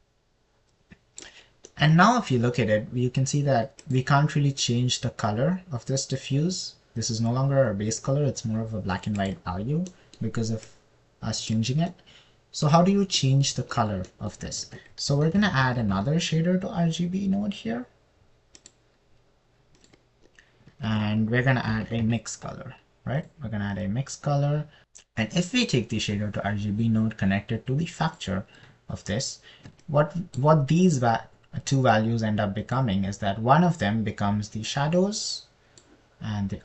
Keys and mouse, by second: 0.5 click, 5.2 click, 12.1 click, 16.0 shift+a, 22.2 shift+a, 27.1 click, 31.2 middle click, 34.1 middle click.